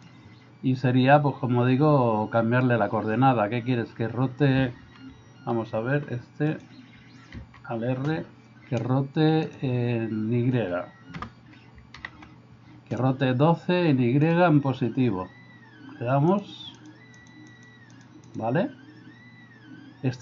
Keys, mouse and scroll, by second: 5.5 alt+r, 7.4 alt+r, 9.5 click, 11.3 BackSpace, 12.0 shift+y, 16.3 click, 16.8 click, 17.2 click, 17.9 click, 18.3 click.